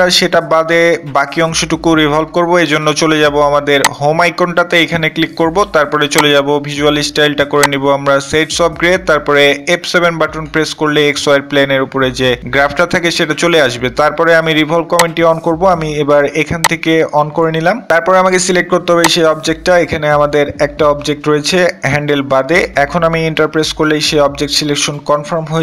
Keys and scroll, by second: 10.3 f, 10.6 F7.